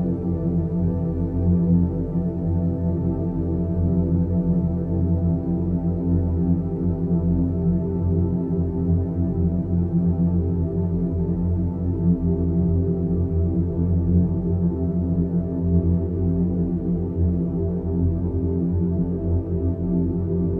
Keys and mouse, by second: 1.3-1.7 drag, 3.1 click, 3.3 g, 4.8-5.5 middle drag, 6.6 shift+click, 7.1 g, 7.9 g, 10.0 click, 12.1 click, 12.2 g, 13.3 Tab, 13.7-14.7 middle drag, 15.1 click, 17.0 click, 18.5 ctrl+i, 20.3 Tab.